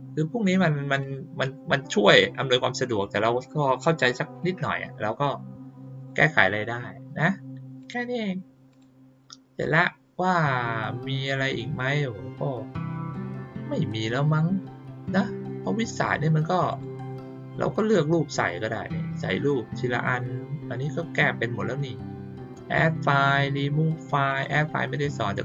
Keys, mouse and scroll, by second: 0.8 click, 5.9 click, 7.7 click, 8.6 click, 16.6 click, 24.2 click.